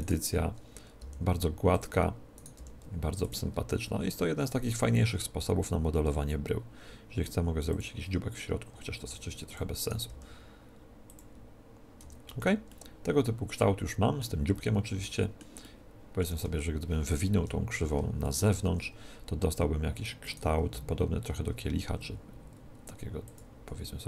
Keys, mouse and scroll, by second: 0.9 g, 1.7-4.9 drag, 2.3-4.0 right drag, 2.5 r, 4.8 e, 7.8-12.6 drag, 8.9 s, 9.7-11.4 right drag, 10.0 g, 11.9 Tab, 12.3 z, 12.8-14.5 middle drag, 14.9-17.3 middle drag, 16.2 Tab, 17.3 KP_1, 18.1-19.9 middle drag, 18.5 z, 19.9-22.0 right drag, 21.6 g, 23.3-24.0 drag.